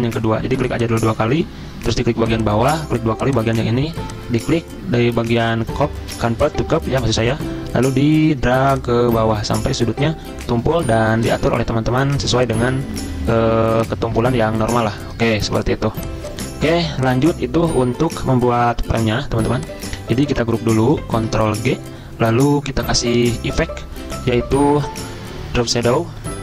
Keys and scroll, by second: 17.6 Delete, 21.2 ctrl+g.